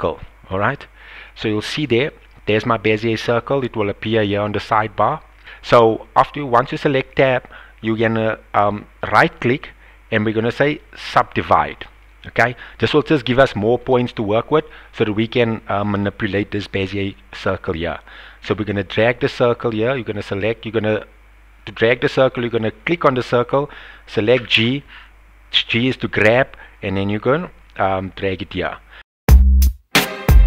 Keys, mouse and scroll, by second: 9.0 right click, 10.6 right click, 13.4 shift+click, 14.9 click, 18.4 g, 21.8 right click, 22.8 click, 24.3 g, 28.6 click, 28.9 g, 29.5 click, 29.7 click, 29.9 g.